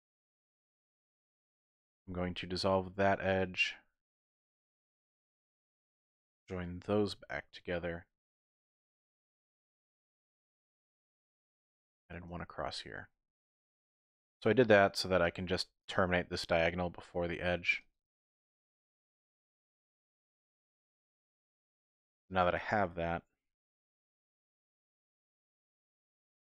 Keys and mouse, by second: 0.4 click, 1.8 x, 4.5 1, 5.3 click, 6.0 shift+click, 6.8 j, 11.4 ctrl+r, 12.3 click, 14.2 k.